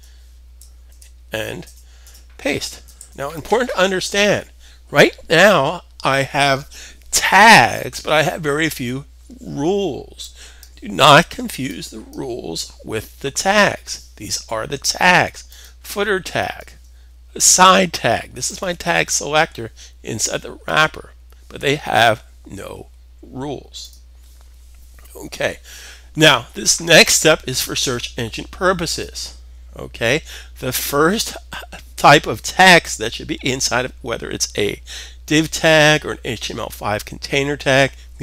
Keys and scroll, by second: 0.4 super+v, 2.5 s.